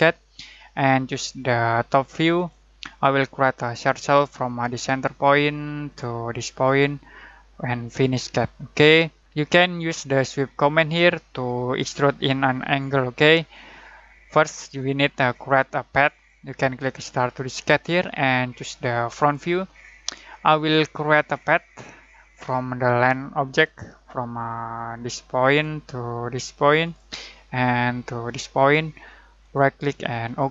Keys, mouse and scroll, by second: 2.3 click, 17.3 click, 20.7 scroll down 1, 23.1-23.4 scroll up 1, 23.4 click, 29.4 right click, 30.2 click.